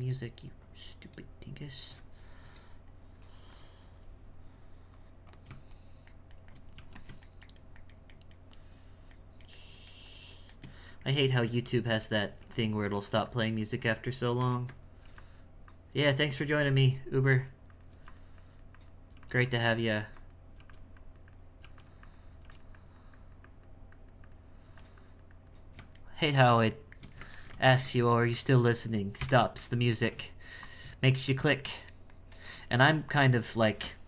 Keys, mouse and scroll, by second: 5.8-6.8 shift+middle drag, 7.3-11.9 shift+middle drag, 12.4 f, 13.3-14.6 drag, 14.6 ctrl+middle click, 15.7 click, 16.5 f, 17.3 click, 17.9 f, 18.4 click, 19.5-20.6 drag, 21.0 click, 21.6 f, 22.0 click, 22.4 f, 22.8-24.7 drag, 25.0-26.1 drag, 26.1-29.2 shift+middle drag, 29.2 KP_1, 30.0 ctrl+middle click, 30.6 shift+click, 31.1-34.0 shift+middle drag.